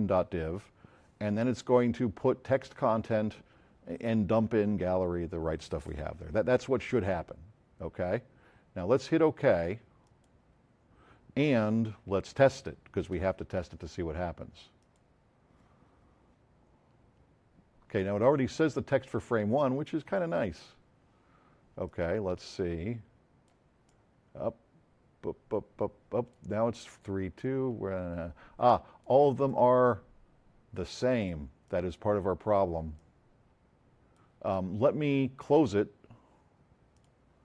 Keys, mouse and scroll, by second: 1.2 click, 10.0 click, 14.8 click, 21.9-22.2 drag, 30.0 F7, 31.6-32.7 drag, 32.9 drag, 34.3-35.3 middle drag, 36.9 click.